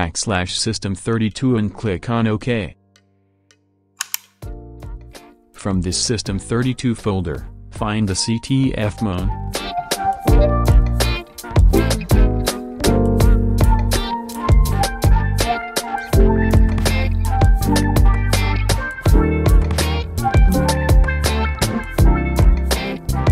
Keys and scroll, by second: 0.1 Right, 0.5 shift+Left, 8.2 Down, 12.3 c, 13.5 Down.